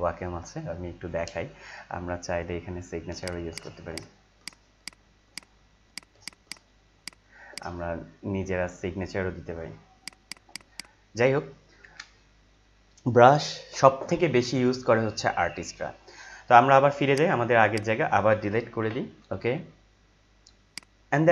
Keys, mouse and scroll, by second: 3.2 click, 9.9 click, 17.1 right click, 17.7 click, 18.8 Delete, 20.6 click.